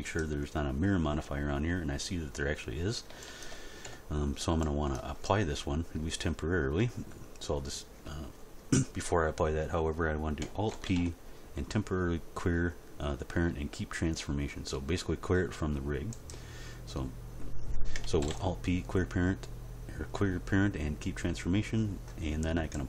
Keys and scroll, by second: 3.8 End, 10.7 alt+p, 18.2 alt+p.